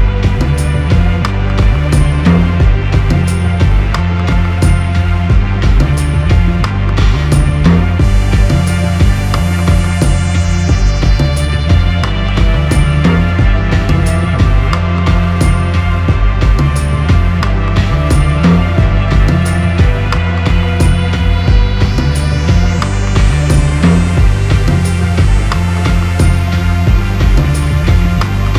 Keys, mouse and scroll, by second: 1.7-2.1 scroll down 4, 2.1 middle click, 2.8 click, 3.3 middle click, 3.5 Tab, 4.0 middle click, 4.2-4.6 scroll down 2, 4.6 middle click, 5.6 7, 6.2 KP_7, 6.9 click, 7.0 click, 7.4 ctrl+r, 10.1 click, 11.9 click, 14.7 v, 16.8 click, 17.3 v, 21.7 click, 21.7 v, 22.1 g, 24.3 v, 24.3 3, 25.1 click, 26.1 g, 27.8 click, 27.8 3, 28.4 middle click.